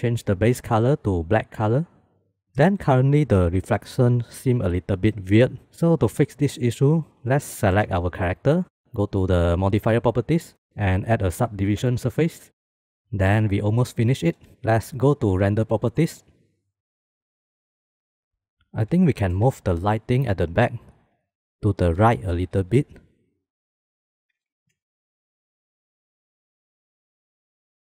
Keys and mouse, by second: 8.1 shift+middle click, 9.9 click, 11.0-12.5 drag, 16.3 click, 17.1 click, 17.3 shift+middle click, 21.0 g, 21.5 click, 24.1 g, 25.1 click.